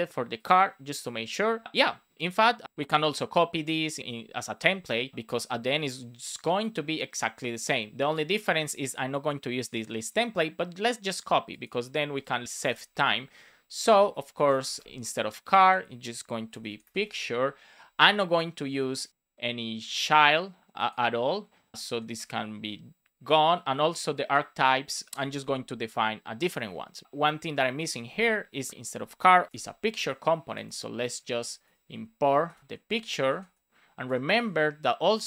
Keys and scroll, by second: 8.4 super+c, 12.5 super+v, 14.3 shift+super+Left, 14.5-16.9 typing, 18.5 BackSpace, 21.7 shift+super+Right, 22.1 BackSpace, 25.0 Down, 25.1 Up, 25.8 Right, 27.0 super+s, 29.3 shift+p, 29.9 super+s, 31.2 super+Left, 31.5 Return, 31.8 Up, 32.6 shift+[, 32.8 space, 33.0 shift+p, 34.0 Return, 34.4 space.